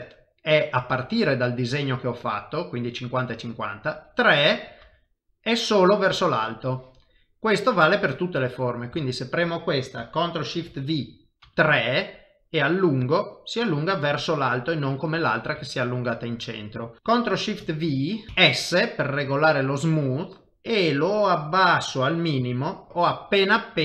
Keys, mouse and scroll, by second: 7.1 middle click, 8.7 click, 9.0 shift+middle click, 10.6 ctrl+shift+v, 13.4 middle click, 15.6 shift+middle click, 15.8 shift+middle click, 16.1 middle click, 17.6 ctrl+shift+v, 22.9 middle click, 22.9 shift+middle click, 23.2 middle click.